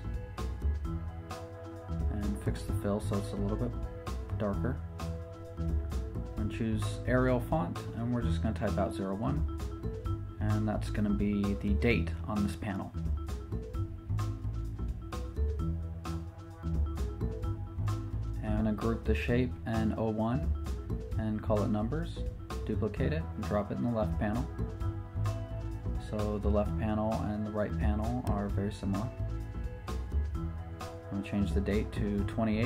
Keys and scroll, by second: 6.1 t, 11.0-12.2 typing, 12.5 super+Return, 15.7 Left, 16.1 Down, 21.3 super+g, 22.3-23.1 typing, 30.5 t, 32.2-32.6 typing.